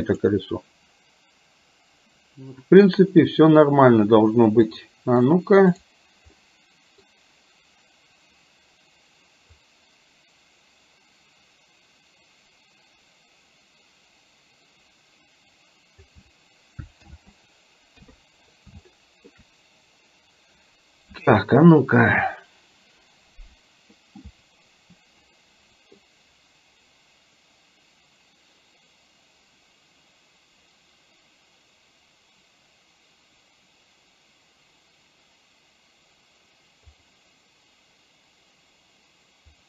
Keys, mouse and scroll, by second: 4.7-5.4 middle drag, 6.5-7.1 middle drag, 9.7-16.1 drag, 17.1 ctrl+z, 18.0 KP_3, 18.9-19.4 middle drag.